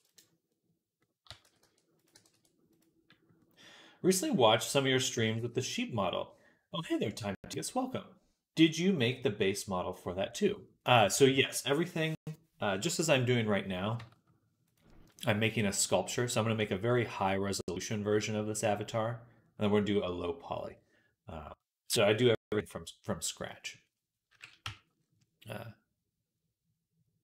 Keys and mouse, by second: 1.1 a, 1.3 s, 2.0 g, 10.7 click, 13.8 Tab, 14.6-17.9 right drag, 18.3-25.6 right drag, 24.1 KP_1, 24.5 Tab.